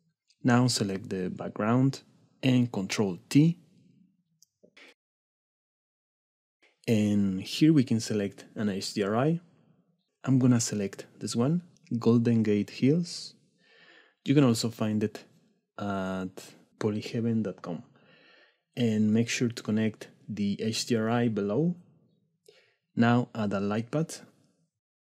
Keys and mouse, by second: 1.7 click, 3.9 middle click, 4.5 click, 22.8 click.